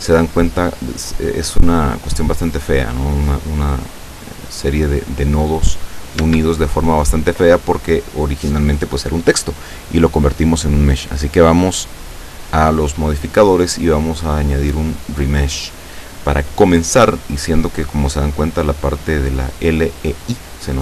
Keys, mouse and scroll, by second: 3.3 middle click, 4.0-4.5 scroll up 1, 6.3 Tab, 11.7 click, 12.8 click, 15.0 click, 15.7 scroll down 1.